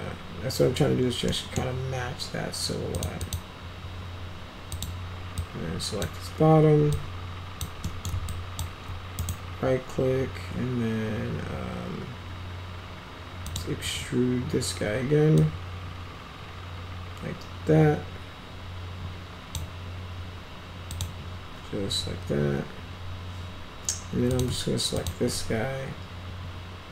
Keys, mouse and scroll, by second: 1.2 middle click, 2.9 click, 3.1 click, 4.7 click, 5.3-5.9 drag, 6.9 alt+click, 7.8 middle click, 8.2 alt+click, 9.1 right click, 13.4 click, 15.3-19.5 drag, 20.8 click, 24.3 click, 24.9 shift+click.